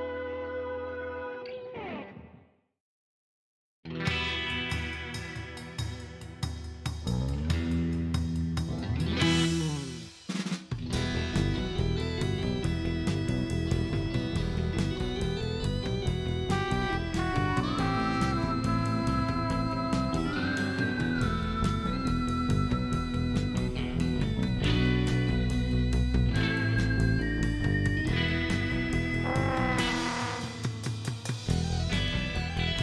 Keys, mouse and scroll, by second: 0.5 shift+scroll up 4, 1.9 shift+right click, 5.9 click, 8.4 click, 9.2 middle click, 11.1 click, 11.9 click, 12.9 middle click, 16.1 click, 17.1 click, 17.6 right click, 19.0 click, 21.0 click, 22.5 click, 23.4 click, 25.2 click, 25.7 right click, 26.0 scroll up 1, 26.4 right click, 27.1 click, 27.7 click, 28.9 click, 32.4 click.